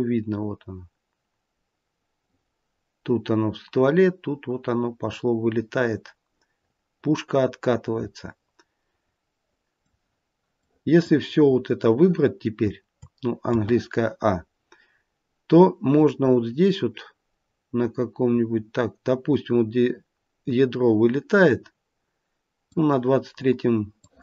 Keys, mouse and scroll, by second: 10.5 click, 11.4 scroll down 1, 13.4 a, 15.9 click, 23.9 click.